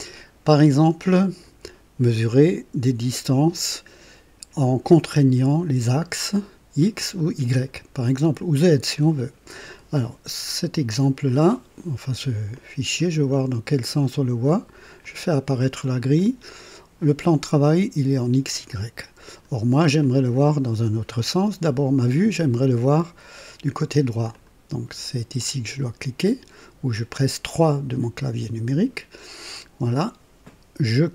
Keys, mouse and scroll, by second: 11.2-12.3 drag, 12.5 click, 14.9 click, 16.1-17.2 drag, 18.5-19.6 drag, 20.0 click, 23.3 right click, 24.3 click, 27.6 click.